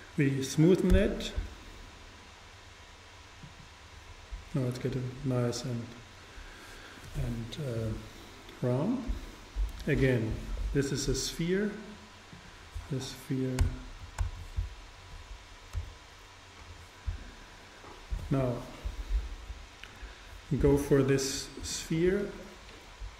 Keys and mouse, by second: 1.0 t, 3.5-5.2 drag, 12.4-14.8 drag, 13.6 BackSpace, 14.0 BackSpace, 15.9 x, 21.8-23.1 super+right drag.